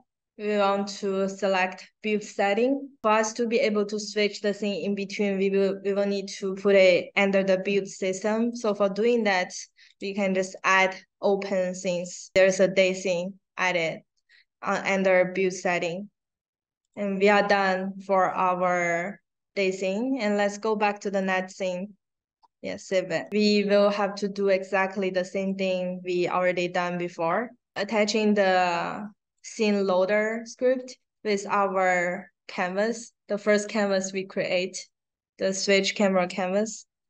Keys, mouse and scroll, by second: 9.8 click, 10.4 click, 10.6 click, 16.7 click, 18.5 scroll down 1, 21.1 click, 22.7 click, 25.3 click, 26.4 click, 29.3 click, 30.9-36.2 drag.